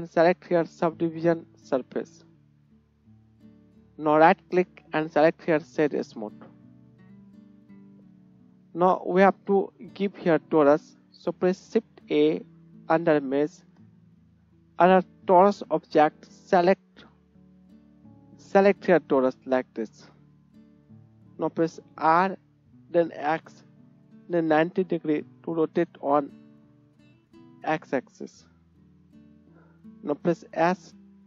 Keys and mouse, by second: 3.9-6.5 right drag, 6.5-7.4 drag, 7.4 shift+right click, 7.5 shift+KP_1, 7.9 drag, 8.2 right click, 11.3 shift+click, 11.8 shift+a, 16.0-19.1 right drag, 20.2 right click, 20.6 click, 20.8 right click, 21.0 Tab, 22.4 r, 23.3 click, 25.4 right click, 26.6 click, 28.6 KP_1, 30.3 s, 30.9 s.